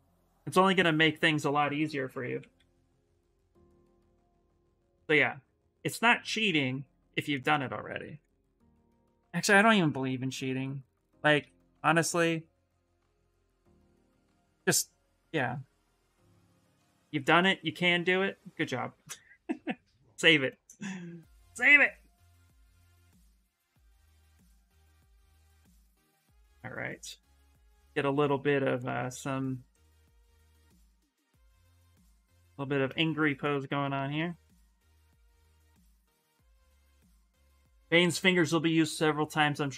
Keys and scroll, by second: 1.6-3.3 typing, 16.7 s, 27.9 s.